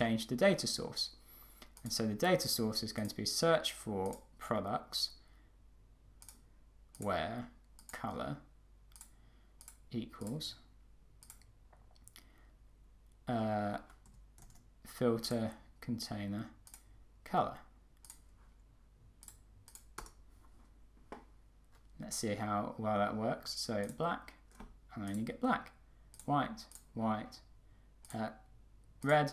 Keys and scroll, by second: 20.1 Return.